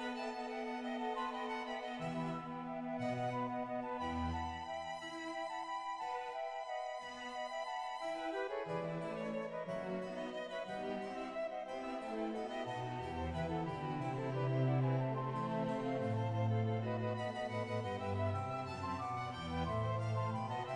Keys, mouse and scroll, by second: 0.1 middle click, 0.1-1.1 scroll down 1, 1.1 g, 1.2 click, 1.5 shift+s, 1.6 z, 2.0 shift+middle click, 2.0 right click, 2.2 click, 2.2 g, 2.5 right click, 3.0 scroll up 4, 3.1 right click, 3.2 middle click, 3.3 g, 5.0 right click, 5.0 click, 5.0 g, 5.1 shift+middle click, 5.1 right click, 6.7 click, 6.7 right click, 8.6 shift+middle click, 8.6-9.5 typing, 9.5 click, 10.0 shift+middle click, 10.0 right click, 10.0-11.5 scroll down 1, 11.5 click, 11.5 g, 11.7 click, 12.3 shift+middle click, 12.3 g, 12.4-15.6 drag, 16.4-17.3 scroll down 1, 17.3 middle click, 18.3 right click, 19.7 ctrl+z, 19.7-20.7 middle drag.